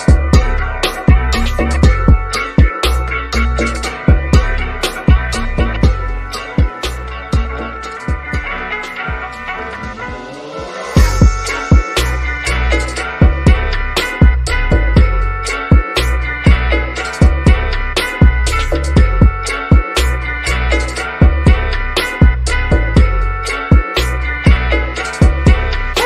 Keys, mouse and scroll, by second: 1.5 click, 2.3-3.2 scroll down 1, 4.0 scroll up 1, 5.5 click, 8.0 1, 9.4 Return, 10.4-10.8 scroll down 1, 11.0 shift+middle click, 11.0 shift+middle click, 11.6-11.9 scroll up 1, 12.5 click, 13.7-14.2 typing, 14.8 Return, 15.9-16.9 scroll down 1, 17.2 shift+middle click, 17.8-19.3 scroll up 1, 20.2 ctrl+shift+m, 21.9 click.